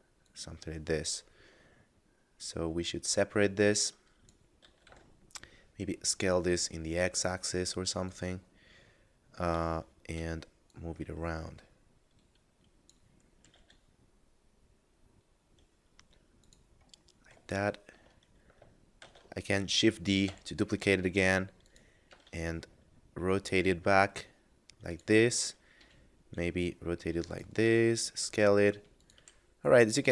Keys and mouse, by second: 0.2 click, 4.5 s, 4.9 x, 8.1 click, 9.7 shift+middle click, 10.7 click, 13.4 g, 13.5 z, 16.2 click, 17.1 middle click, 17.6 shift+middle click, 19.0 shift+d, 20.3 y, 21.6 click, 22.0 r, 22.2 z, 24.9 click, 25.8 r, 27.2 click, 27.6 s, 28.9 click, 29.2 g.